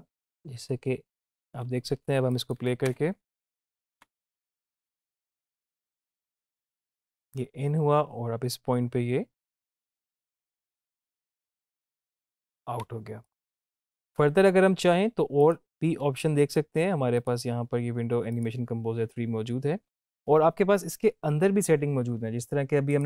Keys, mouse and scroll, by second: 3.9 space, 12.8 space, 13.5-13.8 drag, 22.9 click.